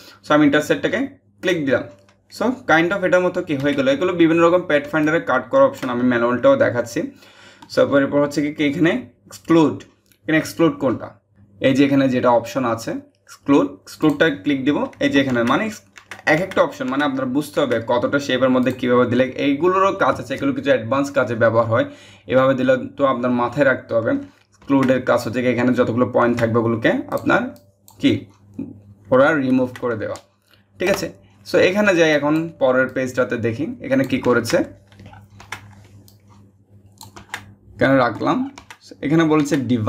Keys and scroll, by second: 3.2 ctrl+z, 30.4 BackSpace.